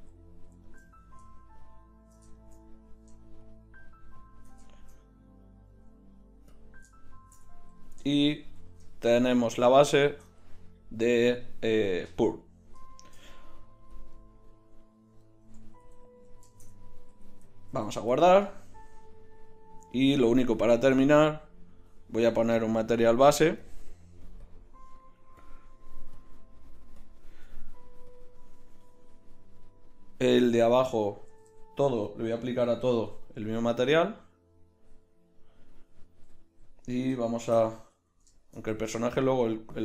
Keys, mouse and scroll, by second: 8.5 KP_1, 15.7-16.5 right drag, 15.9 a, 17.7 ctrl+s, 22.4-23.6 drag, 24.1-27.9 drag, 31.3 a, 31.5 a, 32.9 ctrl+l, 37.4 shift+c, 37.8 KP_1.